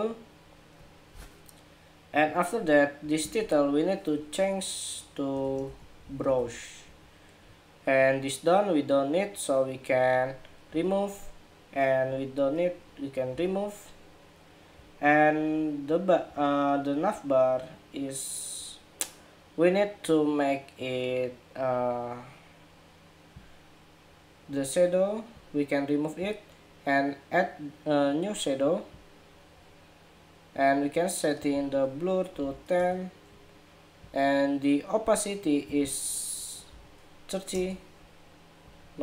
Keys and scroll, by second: 6.6 Escape.